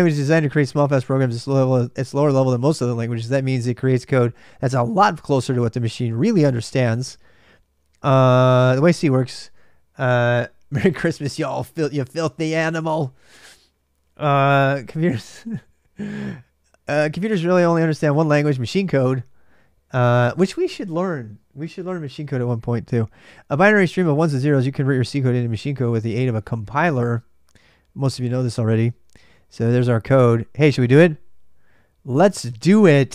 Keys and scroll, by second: 0.0-33.1 typing.